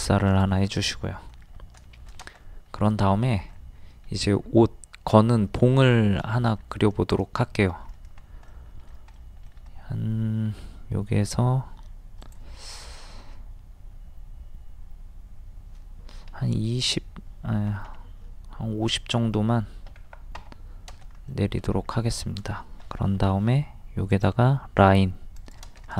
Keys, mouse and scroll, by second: 0.3 click, 0.7 middle click, 1.6 scroll down 1, 2.1 shift+middle click, 6.6 middle click, 7.2 scroll up 1, 7.4 middle click, 7.9 scroll up 1, 8.5 middle click, 8.9 scroll up 1, 9.2 middle click, 9.6 scroll up 1, 10.5 scroll up 1, 12.2 click, 16.5 KP_2, 16.8 KP_0, 17.7 BackSpace, 19.9 KP_5, 20.1 KP_0, 21.8-22.2 scroll up 1, 23.2 shift+i, 24.1 click.